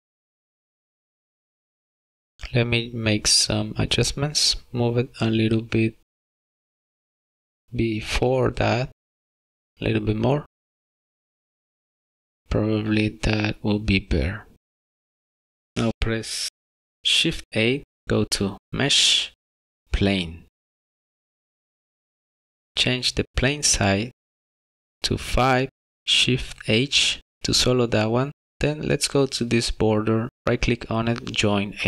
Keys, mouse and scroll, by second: 1.7 click, 2.0 click, 3.7 click, 6.4 click, 13.6 click, 14.4 click, 17.0 shift+a, 26.0 shift+h.